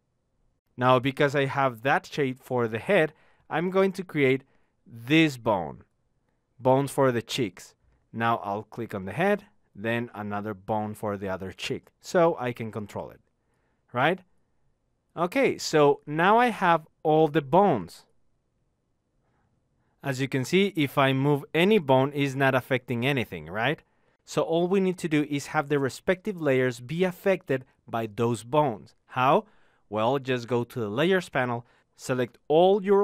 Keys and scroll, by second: 17.9 Home, 20.1 z, 25.5 ctrl+z.